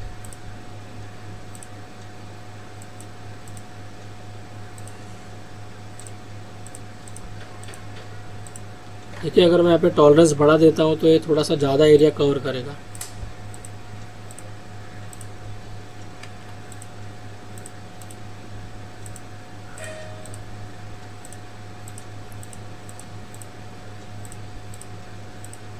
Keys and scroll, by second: 16.4 ctrl+z.